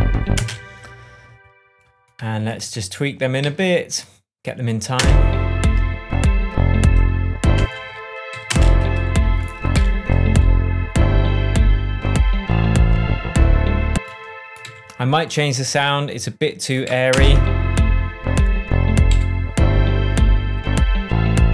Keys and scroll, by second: 0.3 space, 3.4 super+a, 4.9 space, 7.5 space, 8.3 Right, 8.4 space, 9.7 p, 13.9 space, 14.6 Left, 16.8 Left, 17.1 space, 19.1 Left.